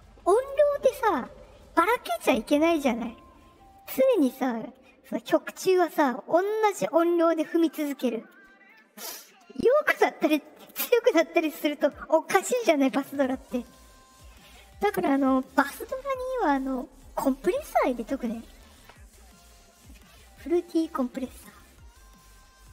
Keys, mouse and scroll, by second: 16.6 click.